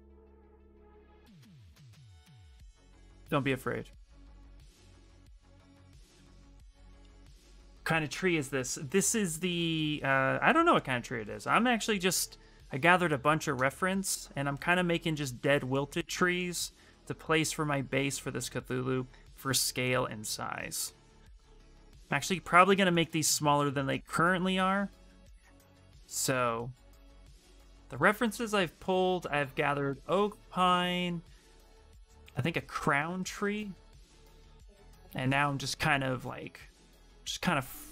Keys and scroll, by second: 1.4 w, 5.8 q, 23.1 w, 23.4 space, 25.5 w, 25.8 q.